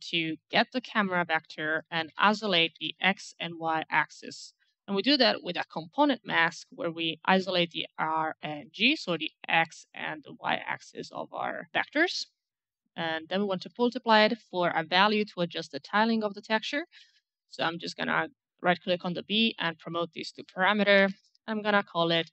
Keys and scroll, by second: 1.5-3.4 typing, 5.7 Return, 12.6 alt+m, 22.0-22.3 typing.